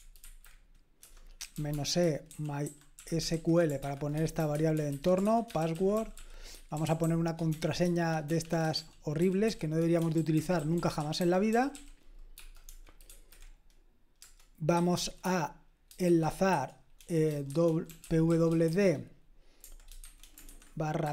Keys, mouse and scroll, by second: 1.0-13.1 typing, 14.2-18.7 typing, 20.0-21.1 typing.